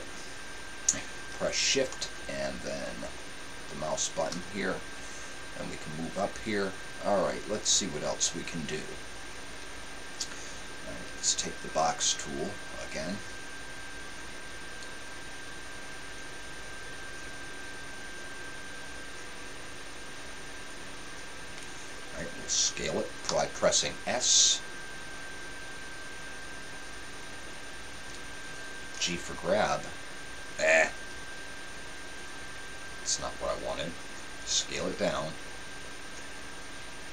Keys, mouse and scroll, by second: 23.3 s.